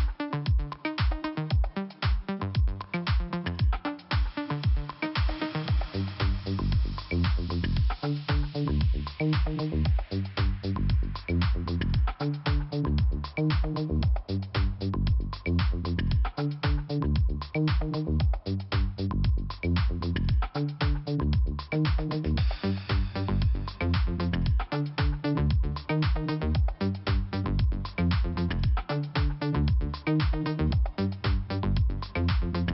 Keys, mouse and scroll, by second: 0.8 click, 1.8 middle click, 2.4-2.7 scroll up 1, 2.7 click, 4.1 scroll up 1, 5.2 middle click, 8.7 middle click, 10.1 click, 15.7 click, 16.4 middle click, 17.6 middle click, 17.8 middle click, 18.5 click, 21.1 middle click, 22.2 middle click, 24.7 scroll up 1, 25.8 click, 32.1 click.